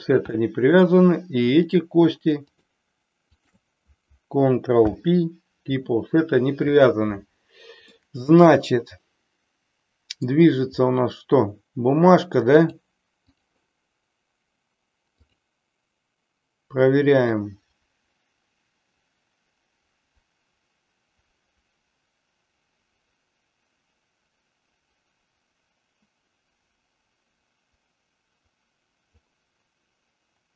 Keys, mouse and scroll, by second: 0.3 middle click, 1.6 click, 2.5 shift+click, 4.9 ctrl+p, 7.9-10.4 middle drag, 12.5 click, 15.3 click, 17.4-29.1 drag.